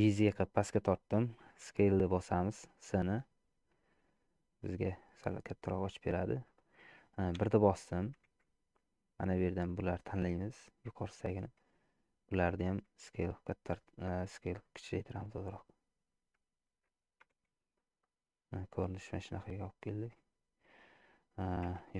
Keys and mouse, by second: 1.8 s, 4.7 middle click, 7.4 KP_1, 8.6 shift+z, 9.4-11.0 drag, 12.9 s, 16.8 Tab, 17.6 shift+z, 18.1-19.9 middle drag, 21.8 Tab.